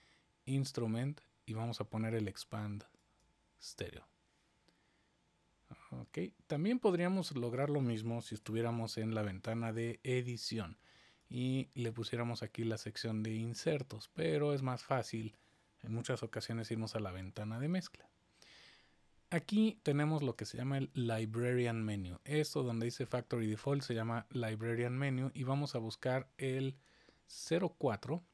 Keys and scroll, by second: 8.2 super+=, 15.9 super+=.